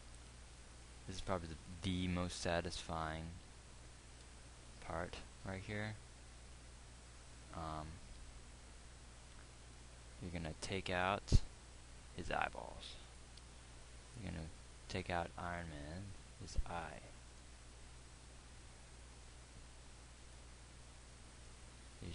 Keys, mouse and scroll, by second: 3.6 KP_3, 4.5 KP_1, 6.0 z.